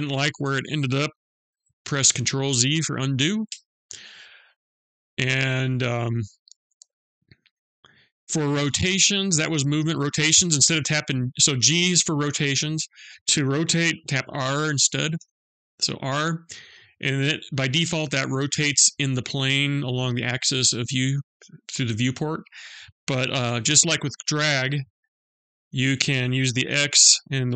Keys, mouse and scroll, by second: 3.2 ctrl+z, 14.8 r.